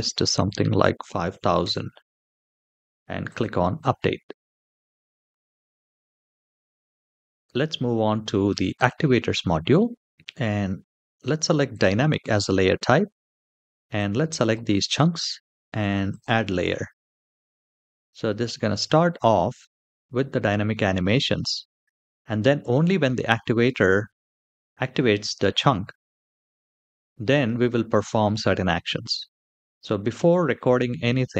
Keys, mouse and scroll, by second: 0.8 KP_0, 3.0 click, 4.9 click, 5.7-8.5 scroll up 4, 8.5 click, 11.4 click, 13.7 click, 15.8 click, 16.8-19.0 scroll down 5, 30.9 middle click.